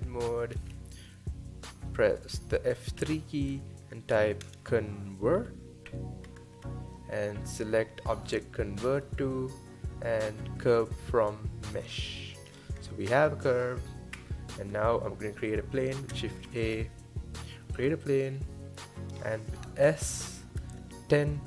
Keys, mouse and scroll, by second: 0.5-3.0 scroll down 3, 3.0 F3, 12.5 scroll up 4, 13.1 Tab, 14.1 Tab, 16.5 shift+a, 18.3-19.2 middle drag, 19.2-19.9 scroll up 1, 19.9 s.